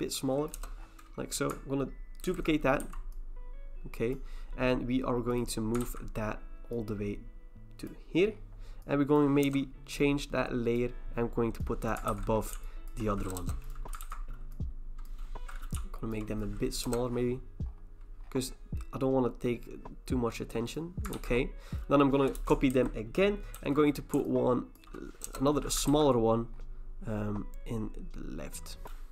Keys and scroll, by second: 0.5 Return, 2.2 ctrl+j, 2.8 v, 5.8 ctrl+t, 9.4 Return, 12.1 ctrl+t, 13.4 Return, 14.0 ctrl+t, 16.8 Return, 21.1 ctrl+t, 22.3 Return, 22.7 ctrl+j, 23.5 ctrl+t, 25.2 Return, 25.9 ctrl+t.